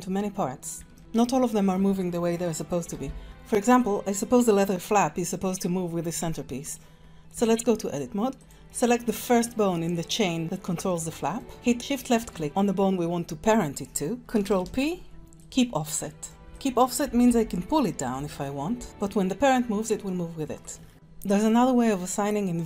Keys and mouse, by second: 0.9 shift+drag, 2.9 g, 7.3 Tab, 8.4 click, 8.8 middle click, 11.1 middle click, 14.4 ctrl+p, 16.3 click, 16.4 Tab, 16.6 click, 17.2 g, 18.8 g.